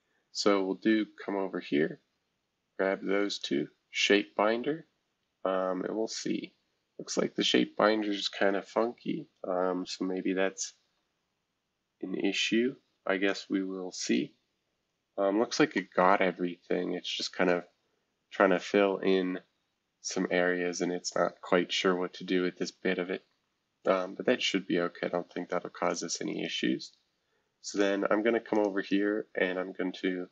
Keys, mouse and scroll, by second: 0.0-0.6 scroll down 3, 3.3 click, 6.7-8.1 scroll down 1, 10.2 space, 12.3 scroll up 2, 13.3 click, 13.5 space, 17.5-18.9 middle drag, 17.7-18.3 scroll down 4, 18.9 scroll down 1, 20.0-21.5 scroll up 1, 21.5-22.2 scroll down 1, 22.2-23.1 scroll down 1, 24.7-25.4 scroll down 1, 25.4-25.9 scroll down 1, 25.9-30.3 drag, 26.3-27.7 right drag, 28.9-30.3 right drag.